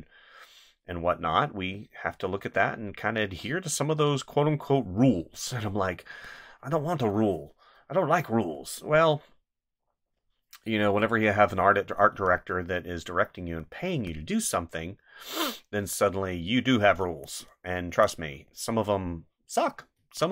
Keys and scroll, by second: 5.1 space, 12.1 space, 14.0 space, 17.0 space, 19.9 space.